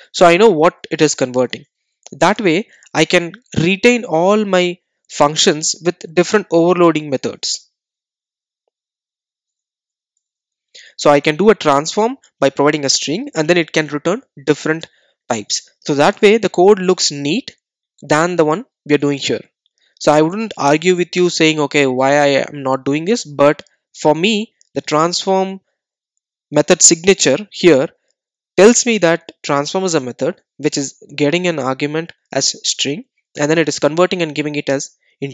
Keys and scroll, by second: 0.6 Return, 6.3 super+d.